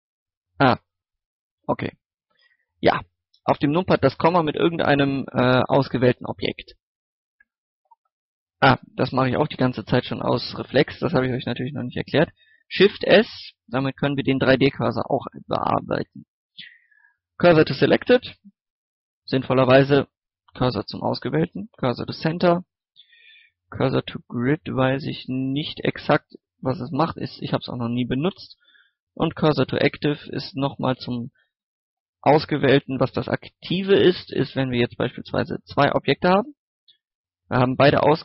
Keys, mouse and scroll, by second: 0.3-0.8 scroll down 1, 0.8 right click, 1.0 KP_Decimal, 1.5-2.0 scroll down 1, 2.5-3.1 scroll up 1, 3.1-6.8 middle drag, 7.3 shift+s, 7.8 click, 8.9 shift+s, 12.8 shift+s, 17.7 click, 20.9 shift+s, 21.9 click, 22.8 shift+s, 23.6 click, 24.6 scroll down 1, 24.8-25.7 scroll up 1, 25.7 middle click, 27.3 shift+s, 28.8 click, 29.9 scroll down 1, 30.2-30.8 shift+scroll up 1, 30.8 scroll up 1, 32.8 shift+middle click, 33.1 shift+a, 34.1 click, 35.1 g, 35.6 click, 36.7 shift+right click, 37.8 scroll up 1.